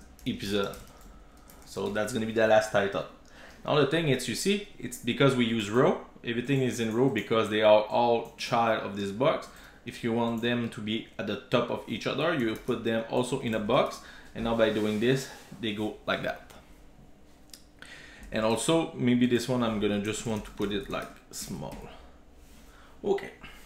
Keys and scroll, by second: 1.9 super+s, 11.8 super+x, 12.8 Tab, 13.5 super+v, 17.9 super+s, 21.8 super+s.